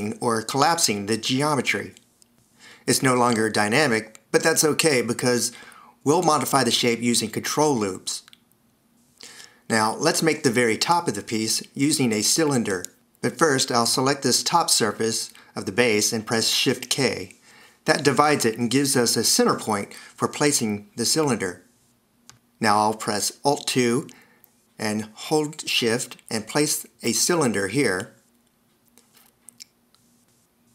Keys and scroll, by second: 6.5 d, 17.1 shift+k, 24.5 alt+2.